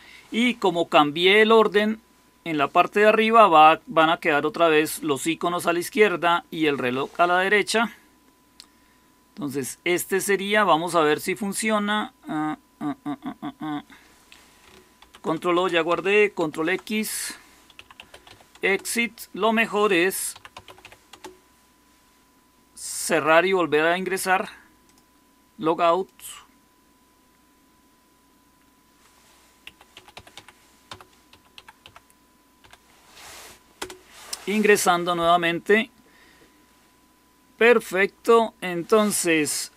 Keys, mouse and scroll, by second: 14.9 ctrl+o, 15.5 Return, 16.3 ctrl+x, 17.4-18.7 typing, 20.2-21.2 typing, 29.3-32.5 typing, 33.7 Return.